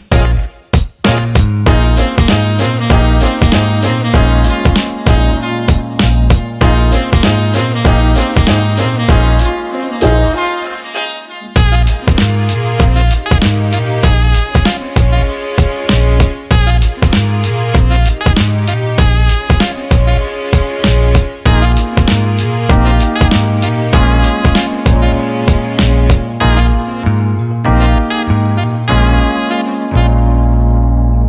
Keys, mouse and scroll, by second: 0.0 click, 0.7 alt+shift+middle click, 3.6 click, 6.8 click, 7.9 click, 8.9-11.8 drag, 13.8 click, 14.7 ctrl+z, 15.8 click, 16.5-19.8 drag, 21.1 click, 22.1 click, 23.0-24.1 drag, 24.4 click, 24.6 click, 25.0 alt+middle click, 25.7 alt+middle click, 27.5-31.2 drag.